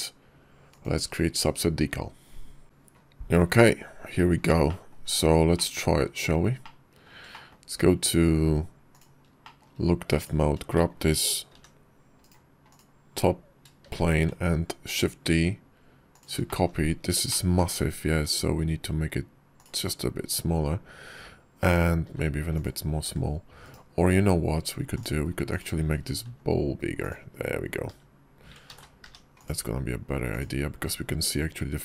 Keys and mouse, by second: 0.6-2.6 drag, 4.5 middle click, 5.4 middle click, 6.4-6.9 middle drag, 7.2 shift+middle click, 8.8 click, 9.3 shift+middle click, 10.0 click, 10.6 shift+middle click, 11.4 g, 12.5 click, 13.7 shift+d, 16.3 shift+click, 17.1 shift+click, 17.9 s, 21.9 s, 22.9 d, 24.7 x, 25.4 click, 26.1 s, 28.5 h, 28.5 ctrl+z, 28.8 g, 30.1 click.